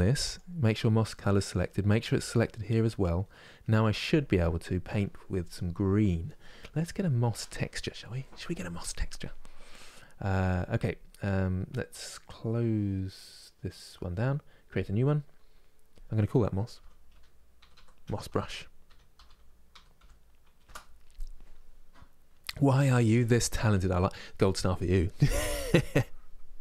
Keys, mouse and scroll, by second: 0.0 click, 2.0-20.4 drag, 20.4 s.